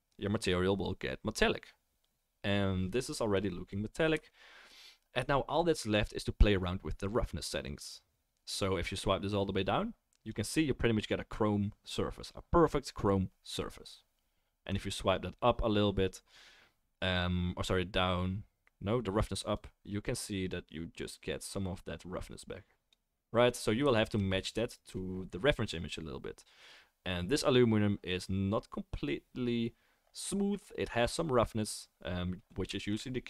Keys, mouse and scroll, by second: 5.5-11.0 middle drag, 11.0-17.7 right drag, 17.7-19.5 drag, 24.1-33.2 middle drag.